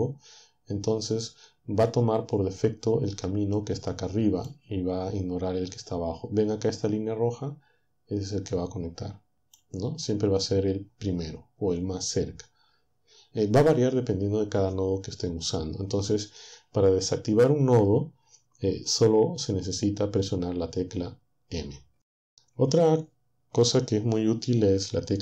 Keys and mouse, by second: 3.6-5.6 drag, 9.3 click.